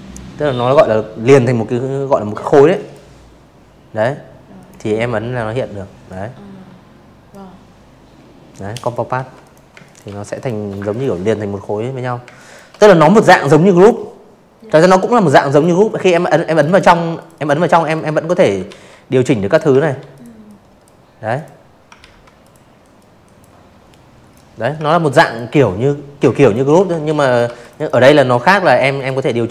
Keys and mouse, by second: 1.5 click, 3.0-4.2 drag, 5.4 click, 6.1 v, 6.3 click, 6.6 space, 6.8 click, 7.0 v, 7.2 click, 7.8 click, 9.2 space, 9.3 click, 10.7 click, 12.4 click, 12.9 click, 13.1 click, 13.4 click, 13.6 click, 14.1 click, 14.3 click, 14.8-15.1 drag, 15.6 ctrl+z, 16.1 drag, 16.7 ctrl+z, 17.0 click, 17.4-17.7 drag, 18.2 click, 18.9 ctrl+z, 19.3 click, 19.9-20.3 drag, 20.8-21.3 drag, 21.8 ctrl+z, 22.1 click, 23.1-24.8 typing, 23.3 click, 24.1 click, 24.5 click, 24.7 click, 24.8 click, 25.9 click, 27.2 z, 27.3 click, 27.5 space, 27.7 click, 27.8 v, 28.4 click.